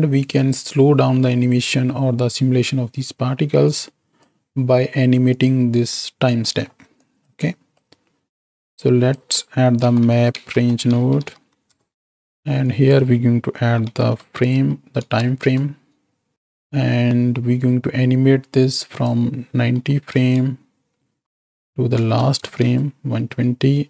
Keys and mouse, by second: 5.3 click, 6.5 middle click, 7.0-7.7 drag, 8.4 x, 8.7-12.0 drag, 12.8-16.3 drag, 16.5 middle click, 18.9-22.7 drag.